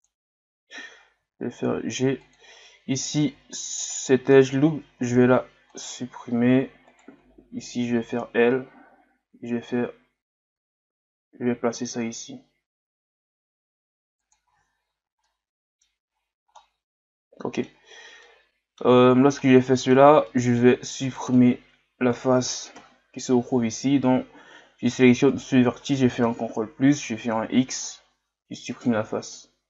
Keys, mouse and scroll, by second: 3.0 alt+right click, 3.9 alt+right click, 5.0 x, 6.9 right click, 8.4-9.3 scroll up 1, 9.3 g, 14.7-15.3 scroll down 3, 15.3 middle click, 16.1-16.6 scroll up 2, 16.6-19.0 middle drag, 19.0-19.4 scroll up 2, 19.4-21.0 middle drag, 21.0 right click, 21.3-22.8 middle drag, 22.8 ctrl+KP_Add, 25.3 right click, 26.3 ctrl+KP_Add, 27.4 x, 29.3-29.6 middle drag.